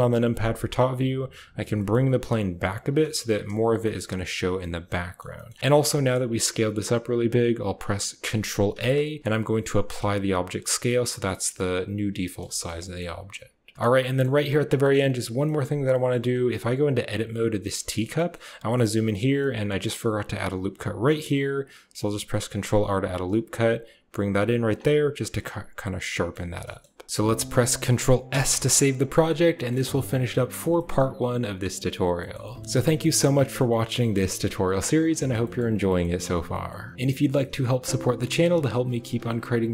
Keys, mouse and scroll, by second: 1.5 g, 3.1 s, 3.7 g, 4.5-5.1 drag, 5.2 g, 5.9 shift+click, 8.6 ctrl+a, 10.8 middle drag, 11.0-11.5 drag, 11.0-11.5 right drag, 12.2 drag, 12.4 shift+click, 12.8 click, 13.7 Tab, 13.7-14.0 drag, 13.7 a, 14.7 click, 15.3 middle click, 15.7 click, 16.9 Tab, 17.6 shift+middle click, 18.0 middle click, 18.6 shift+click, 19.2 middle click, 20.7 ctrl+r, 24.6 Tab, 25.2-26.1 drag, 26.3 a, 26.5 shift+drag, 26.9 click, 28.1 ctrl+s, 29.0 shift+click, 29.4 drag, 30.6 shift+click, 32.0 right click, 32.4 right click, 32.8 click, 33.6 click, 34.2 click, 35.0 click, 35.8 click, 36.4 click, 37.2 click.